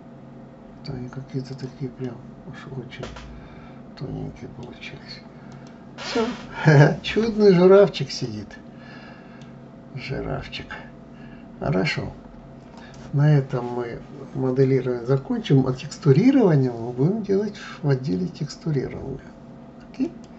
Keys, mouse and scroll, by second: 2.0-4.8 middle drag, 4.8 scroll down 2, 5.5 click, 6.3-7.5 middle drag, 7.5-8.2 scroll up 2, 8.2-10.0 middle drag, 10.0-13.0 scroll up 1, 20.0 click.